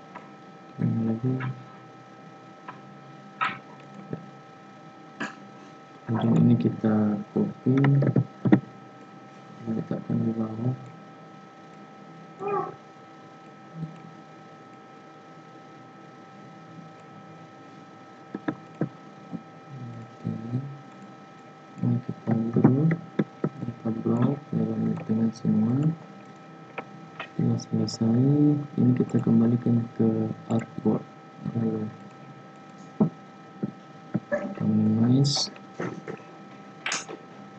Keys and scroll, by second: 8.0 ctrl+c, 8.3 ctrl+f, 22.4 ctrl+g.